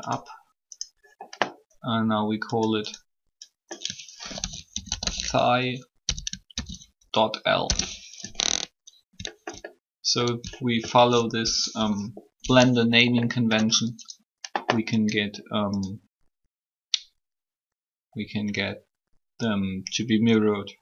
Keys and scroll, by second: 3.8-6.5 typing, 7.6 Return, 11.6 alt+shift+3.